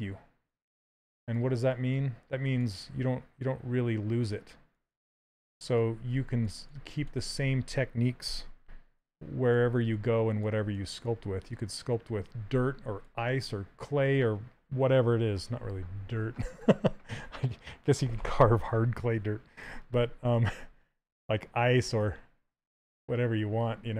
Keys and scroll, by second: 1.1 s, 7.9 d.